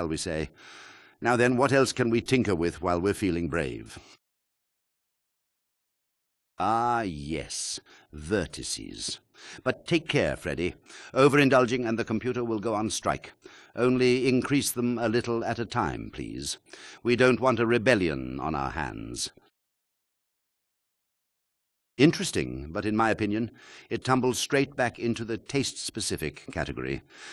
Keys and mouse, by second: 3.3 shift+click, 6.0 alt+shift+click, 9.5 click, 10.3 click, 10.9 click, 13.9 click, 26.5 click.